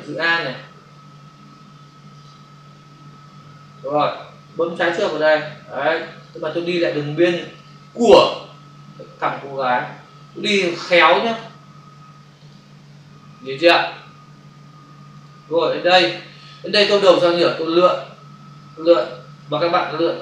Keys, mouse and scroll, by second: 2.7 alt+click, 4.8 click, 6.1 click, 7.5 click, 10.4 click, 12.4 click, 15.2 click, 19.3 click.